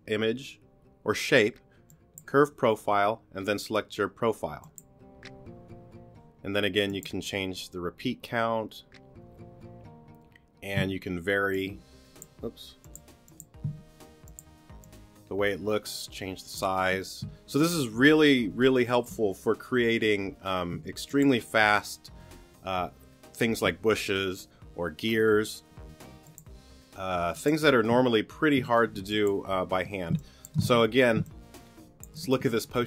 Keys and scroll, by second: 10.8 t, 13.7 t, 17.5 t, 20.7 t, 28.8 t, 30.1 space.